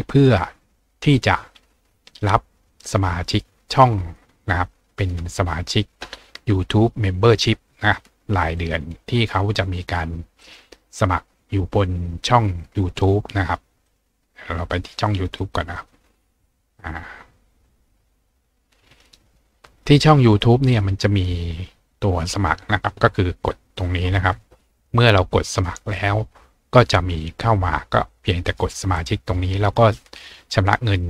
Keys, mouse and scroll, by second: 0.1 click, 8.6 click, 10.4 click, 13.9 click, 15.8 click, 24.8 click, 25.5 click.